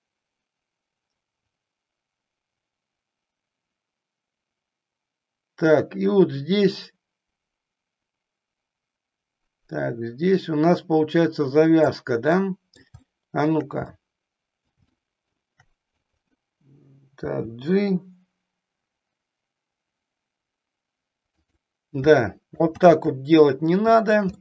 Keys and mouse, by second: 12.3 middle click, 14.1 middle click, 15.1 shift+middle click, 15.9 click, 17.2 g, 21.4 click, 22.7 ctrl+z.